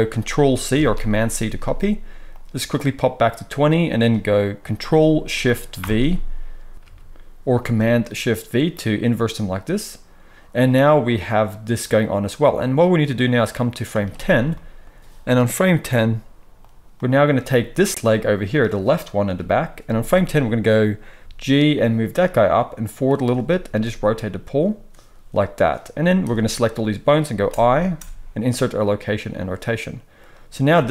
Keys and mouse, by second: 0.7 ctrl+c, 5.7 ctrl+shift+v, 6.7 KP_1, 6.7-14.5 drag, 6.7 KP_3, 14.8-16.9 drag, 17.2-17.8 drag, 17.8-26.3 middle drag, 19.2 KP_3, 21.1 g, 23.6 r, 26.3-30.9 drag, 27.4 u, 27.9 i, 30.7 space.